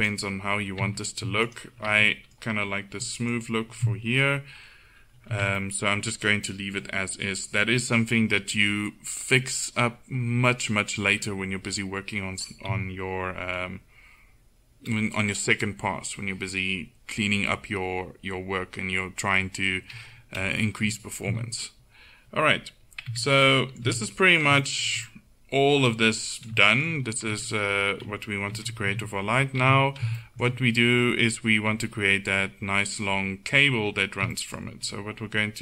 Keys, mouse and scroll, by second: 0.0-1.5 drag, 0.9 Tab, 5.4 Tab, 12.8 KP_1, 21.3 z, 23.2 Tab, 24.0 a, 27.4 Tab, 28.6 KP_1, 28.9 z, 29.7 a.